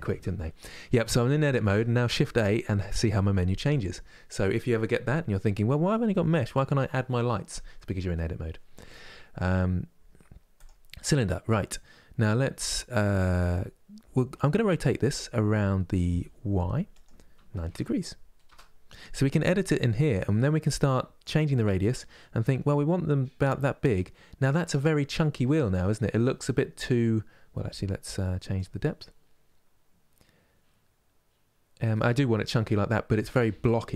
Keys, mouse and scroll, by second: 1.0 Tab, 1.9 shift+a, 16.6-19.6 drag, 20.9-24.0 drag, 24.9 middle click, 25.8-28.3 scroll down 1, 28.3-32.2 drag, 32.2-33.9 middle drag.